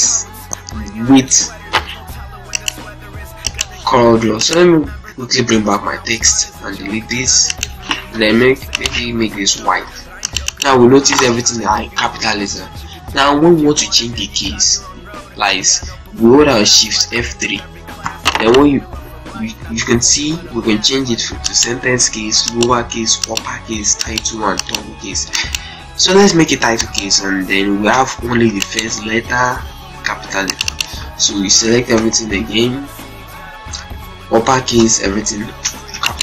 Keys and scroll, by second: 1.6 ctrl+z, 6.4 Delete, 9.3 shift+F2, 10.6 ctrl+a, 16.8 shift+F3, 27.7 ctrl+space, 28.2 ctrl+z, 29.7 ctrl+space, 30.8 ctrl+a, 31.3 shift+F3, 31.7 u, 34.5 Return, 35.3 ctrl+space, 35.7 ctrl+z, 36.1 ctrl+space.